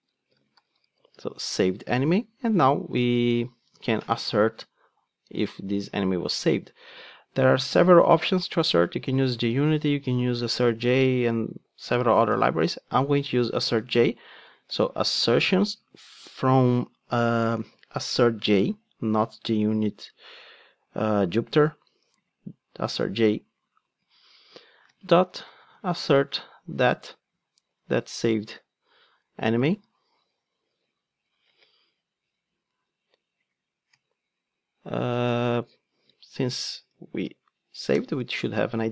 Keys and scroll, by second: 17.7 ctrl+space, 26.9 Return, 32.3 Escape, 37.9 Return.